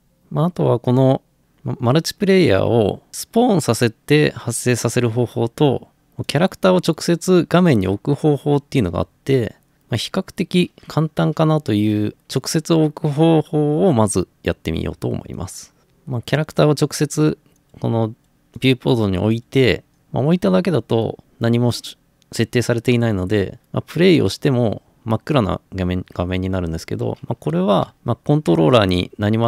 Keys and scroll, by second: 27.5 Escape.